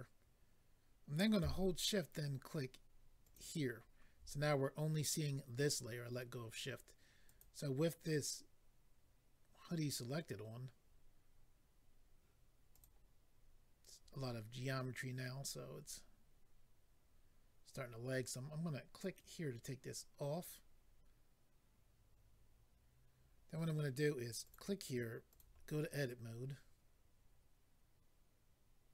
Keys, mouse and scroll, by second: 3.2 shift+click, 7.2 click, 7.4 click, 12.7 click, 12.8 click, 19.0 click, 19.1 click, 24.4 click, 25.3 click, 26.4 scroll up 1.